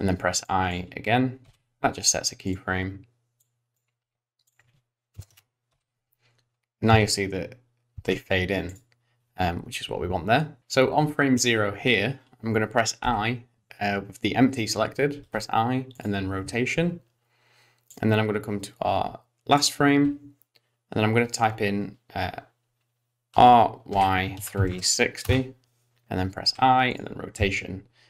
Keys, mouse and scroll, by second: 0.5 click, 1.5 i, 2.5 click, 3.5 click, 4.6 click, 5.8 i, 6.9 space, 8.0 space, 8.7 click, 10.6 click, 13.1 i, 15.3 i, 18.0 click, 23.4 r, 26.5 i, 27.4 space.